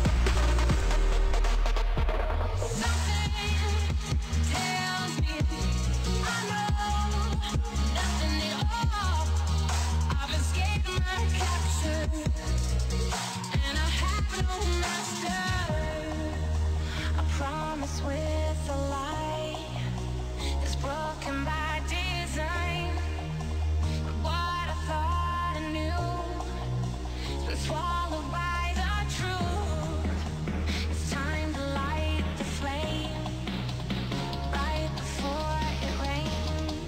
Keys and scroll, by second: 4.1 Delete.